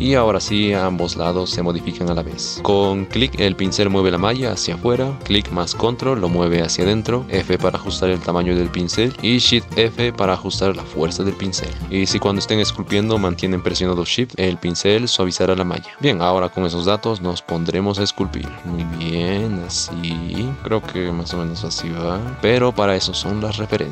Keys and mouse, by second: 0.1 middle click, 0.5 middle click, 1.9 middle click, 2.6-5.2 middle drag, 7.0 middle click, 7.4 f, 9.4 shift+f, 11.8 f, 14.5-16.0 shift+drag, 16.0-17.2 middle drag, 18.6-20.6 shift+middle drag, 20.6-22.4 shift+drag, 22.4 shift+middle click, 22.9 middle click.